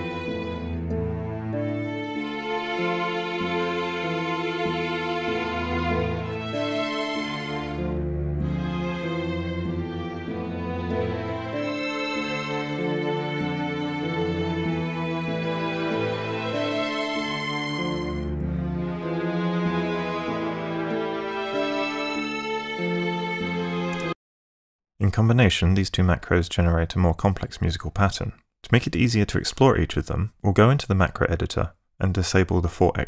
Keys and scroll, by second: 24.0 space.